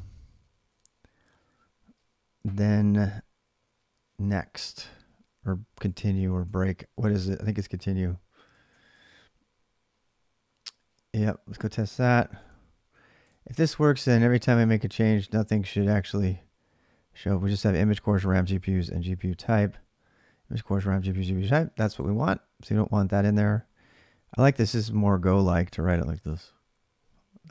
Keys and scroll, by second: 0.0-1.7 typing, 5.4-6.7 typing, 8.1-9.0 typing, 10.9 alt+Tab, 12.1 ctrl+r, 14.7-15.5 typing, 18.6 alt+Tab, 23.0 ctrl+[, 23.0 j, 24.2 ctrl+[, 24.3-26.4 typing.